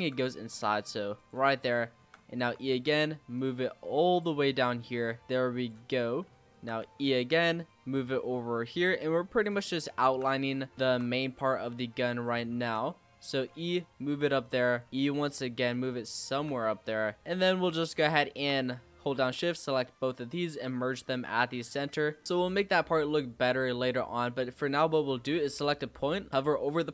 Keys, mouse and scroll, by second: 1.4-1.7 scroll down 5, 1.7 shift+middle click, 2.3 e, 3.3 click, 4.4-5.0 scroll up 7, 5.0 shift+middle click, 5.3 click, 5.8-6.2 scroll down 5, 6.2 shift+middle click, 6.8 e, 7.5 click, 9.6 shift+middle click, 10.3-10.7 scroll up 4, 10.7 shift+middle click, 11.2 g, 12.6 ctrl+z, 13.2 e, 14.8 e, 16.0 shift+middle click, 16.6 e, 17.9 shift+click, 19.3 m, 21.2 g, 22.1 scroll down 2, 22.2-22.9 scroll up 1, 22.9 z, 24.0-26.8 scroll up 3, 26.8 l.